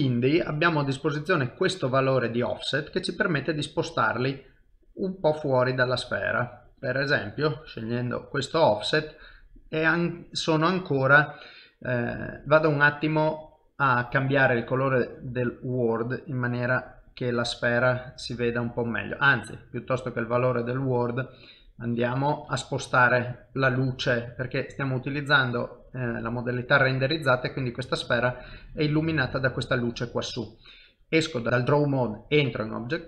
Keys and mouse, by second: 0.6 click, 4.6 click, 8.5 middle click, 13.4 click, 22.6 ctrl+middle click, 23.3 middle click, 23.8 shift+middle click, 24.3 middle click, 25.7 ctrl+middle click, 26.1 shift+middle click, 29.7 middle click, 30.9 ctrl+Tab, 31.5 ctrl+Tab.